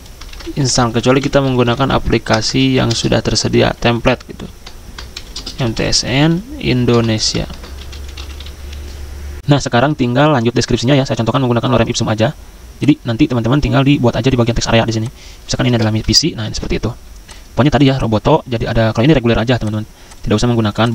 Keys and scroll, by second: 0.3 ctrl+a, 0.4 Caps_Lock, 1.5-3.1 typing, 4.6-8.6 typing, 9.4 alt+Tab, 15.9 ctrl+v, 16.4 ctrl+a.